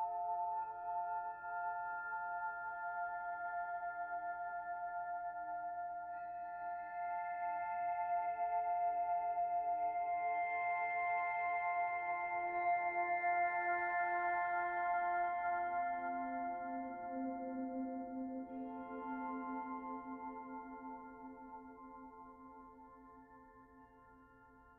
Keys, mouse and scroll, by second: 2.2 middle click, 3.5 click, 3.9 middle click, 4.7 shift+click, 5.1 middle click, 7.1 s, 9.6 middle click, 11.4 shift+middle click, 12.3 middle click, 13.8 click, 15.1 e, 20.8 click, 21.4 middle click, 22.6 e.